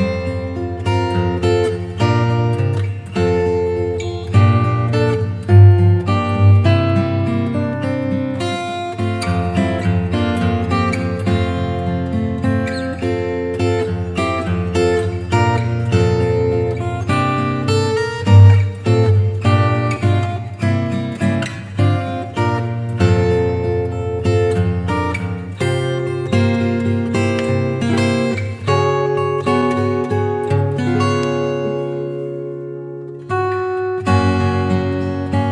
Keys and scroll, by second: 0.9 p, 6.2 space, 6.9 space, 7.5 space, 10.2 space, 12.1 space, 14.7 Home, 17.5 v, 17.9 super+t, 18.5 alt+super+t, 23.7 Return, 25.1 space, 29.5 b, 33.9 [, 35.4 [.